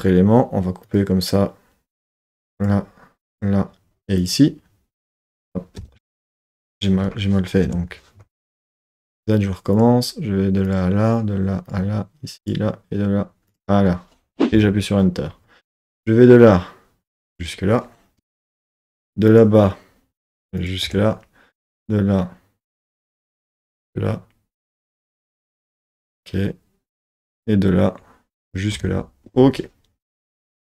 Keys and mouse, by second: 8.6 super+z, 9.7-14.9 drag, 15.9-18.2 drag, 19.3-20.9 drag, 21.6 click, 22.6-24.7 drag, 25.8 middle click, 27.3-28.8 drag, 30.4 click.